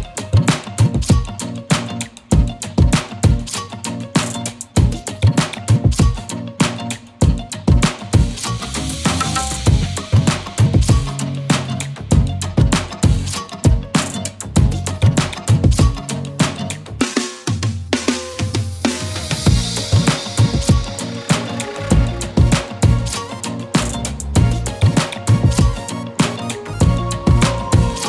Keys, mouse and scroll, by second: 0.9-2.5 drag, 6.4-7.7 typing, 6.8 click, 7.1 click, 7.6 click, 7.9 click, 10.6-13.2 typing, 17.0-20.3 typing, 17.1 scroll up 1, 17.4 click, 17.8 click, 18.1 click, 18.5 click, 18.9-20.0 click, 19.7 click, 20.1 click, 20.4 click, 22.6-24.4 scroll down 1, 24.7 z, 24.7 click, 24.9 space, 25.1-25.7 click, 25.5 space, 26.6-28.0 drag.